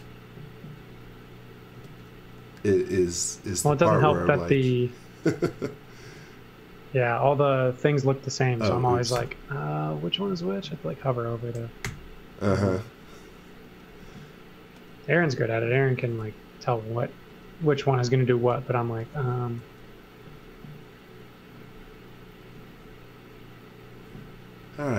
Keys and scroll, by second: 1.8 space, 2.8 space, 6.0 space, 7.0 space, 9.2 u, 11.8 g, 15.2 space, 19.5 space.